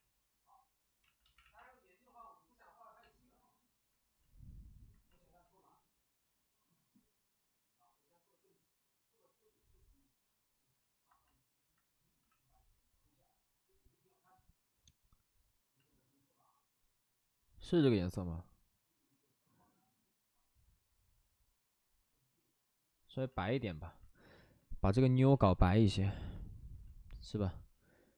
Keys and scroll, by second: 1.0 ctrl+z, 1.4 x, 12.1 c, 25.2 b, 25.6 p.